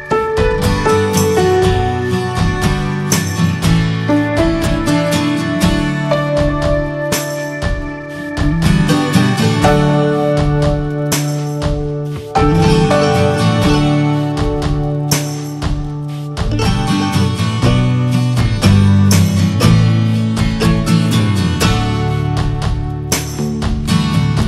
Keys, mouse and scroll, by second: 0.8 /, 1.3 click, 1.5 click, 1.7 Tab, 2.0 middle click, 2.2 scroll up 2, 2.4 shift+middle click, 3.1 scroll down 2, 3.4 middle click, 3.8 ctrl+r, 4.8 middle click, 5.2 ctrl+b, 8.9-11.1 middle drag, 11.1 ctrl+z, 11.5 shift+middle click, 12.2 scroll up 1, 12.4 shift+middle click, 13.0 ctrl+b, 19.6 Tab, 19.9 click, 20.2-20.8 middle drag, 20.8 click, 21.2 Tab, 21.7 middle click, 22.2 Tab, 22.4 click, 22.8 click, 23.2 ctrl+a, 23.5 ctrl+j, 24.4 ctrl+a.